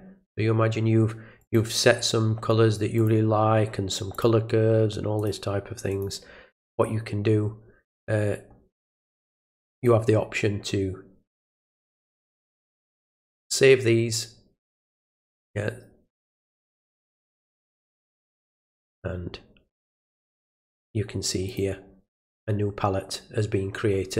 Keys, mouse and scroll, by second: 1.4 click, 3.0 click, 4.1 click, 5.2 click, 5.9 click, 9.7 click, 11.5 click, 14.9 click, 16.1 click, 18.0 click, 20.1 click, 21.5 click.